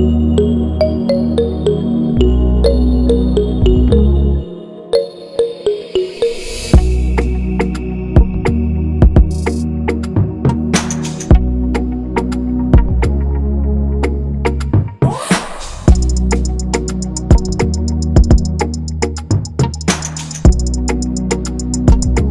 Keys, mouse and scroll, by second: 2.1 shift+click, 4.6 shift+click, 7.5 double click, 8.9 shift+Up, 9.9 shift+Down, 10.2 shift+Up, 10.8 shift+Up, 11.8 v, 12.2 double click, 13.0 double click, 13.2 shift+click, 13.9 double click, 18.2 double click.